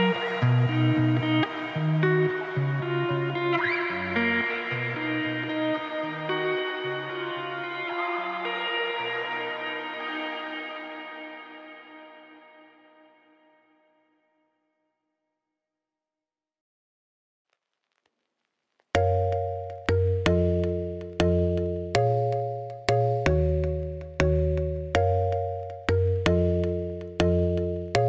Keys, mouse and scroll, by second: 1.9 middle click, 2.3 Tab, 2.7 ctrl+r, 3.3 3, 3.4 click, 3.6 middle click, 3.7 g, 4.3 middle click, 5.1 scroll down 1, 5.3 middle click, 5.7 scroll up 5, 5.8 middle click, 6.1 Tab, 6.4 middle click, 7.2 shift+a, 8.5 middle click, 8.6 Tab, 8.8 s, 9.7 KP_1, 10.4 s, 12.8 Tab, 13.1 KP_1, 13.9 r, 15.6 middle click, 16.5 KP_3, 17.1 shift+middle click, 17.2 scroll up 7, 17.4 r, 19.1 shift+middle click, 19.3 click, 19.4 Tab, 19.6 1, 19.7 click, 20.0 z, 21.4 Tab, 21.6 middle click, 21.8 click, 22.0 Tab, 22.2 middle click, 22.3 3, 22.5 click, 22.6 middle click, 23.1 click, 23.3 middle click, 23.4 g, 24.1 middle click, 24.4 scroll down 3, 24.7 click, 24.8 z, 25.0 middle click, 25.2 g, 27.1 scroll down 1, 27.2 Tab, 27.4-28.0 shift+middle drag.